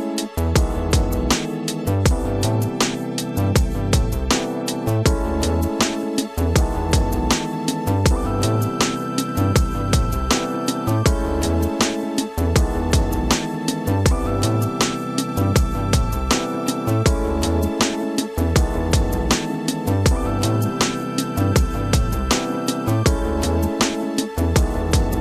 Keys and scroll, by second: 1.5 l, 4.9 ctrl+shift+u, 5.7 ctrl+d, 7.7 [, 11.3 space, 20.2 ctrl+KP_Subtract, 20.7 space, 21.9 ctrl+KP_Subtract, 22.9 ctrl+space, 24.2 f, 24.5 space.